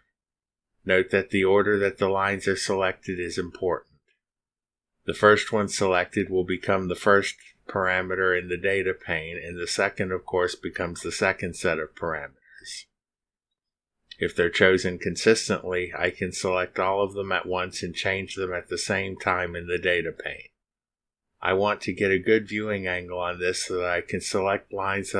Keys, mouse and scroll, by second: 8.2-9.5 middle drag, 8.3-10.6 drag, 11.9 click, 13.1 middle click, 13.3-14.9 drag, 16.0-16.3 scroll up 2, 24.8 click.